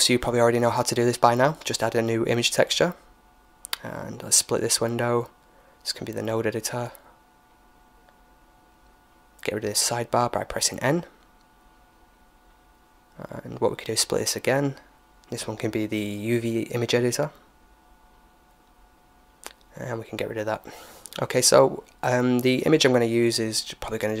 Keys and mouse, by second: 3.7-5.5 drag, 6.2-7.9 drag, 10.3 n, 11.1-12.8 middle drag, 12.8-16.1 drag, 16.6-18.3 drag, 18.9-21.1 middle drag, 20.6-22.5 drag, 22.9-24.2 middle drag.